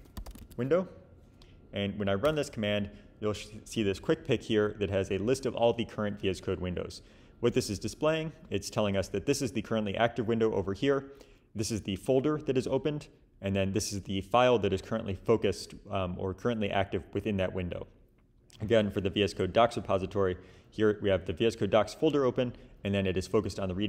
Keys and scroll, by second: 0.0-0.8 typing, 2.2 Return.